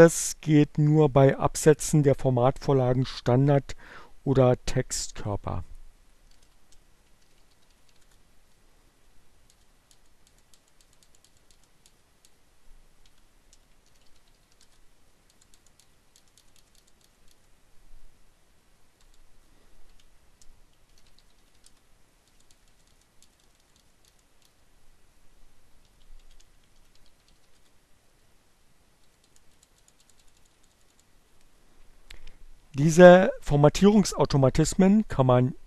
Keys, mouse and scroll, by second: 5.4-8.5 typing, 7.7 shift+Return, 12.6-14.8 typing, 18.0 BackSpace, 19.3-21.9 typing, 24.8-28.2 typing, 35.1 click.